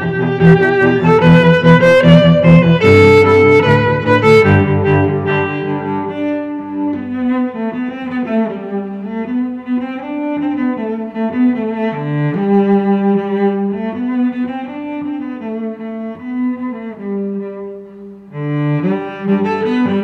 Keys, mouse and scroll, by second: 5.5-7.0 ctrl+r, 14.2 a, 16.7 ctrl+r.